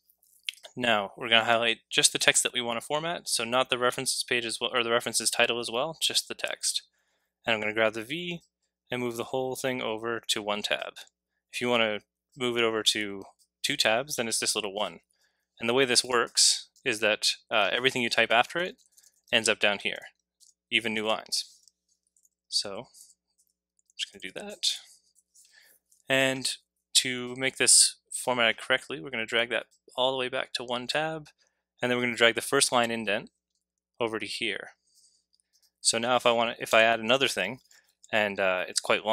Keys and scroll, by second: 17.6-21.4 typing, 36.7 Return.